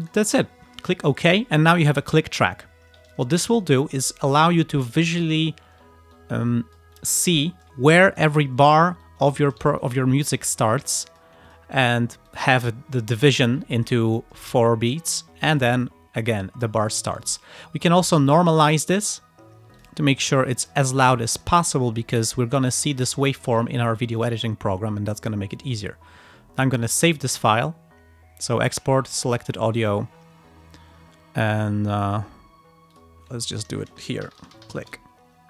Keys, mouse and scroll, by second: 0.1 click, 1.3 click, 2.0 ctrl+scroll down 2, 3.5 ctrl+scroll up 2, 4.9 click, 5.5 ctrl+scroll up 2, 6.2-7.3 ctrl+drag, 7.3 ctrl+scroll down 2, 8.0 ctrl+click, 8.4 ctrl+scroll up 2, 8.7 ctrl+click, 9.1 ctrl+click, 9.9 click, 10.7 click, 11.5 click, 12.3-14.1 drag, 14.2 click, 15.1 click, 15.6 click, 16.5 ctrl+scroll up 2, 16.7-17.2 ctrl+scroll down 2, 17.3 ctrl+click, 18.1 click, 19.9 click, 20.7 click, 21.4 ctrl+click, 21.8-22.1 ctrl+scroll up 2, 23.2 click, 23.8-24.2 ctrl+scroll down 2, 24.3 ctrl+click, 24.6 ctrl+scroll down 2, 25.7 click, 26.8 click, 29.4 click, 33.0 click, 33.6 ctrl+click, 33.8 ctrl+a, 34.2-35.2 typing.